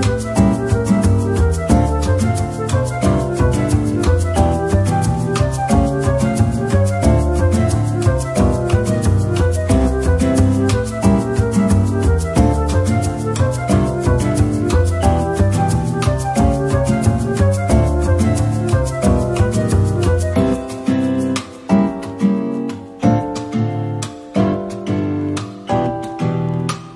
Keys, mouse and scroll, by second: 0.1 typing, 1.9 Tab, 2.4 middle click, 8.3 Tab, 8.9 a, 23.3 a.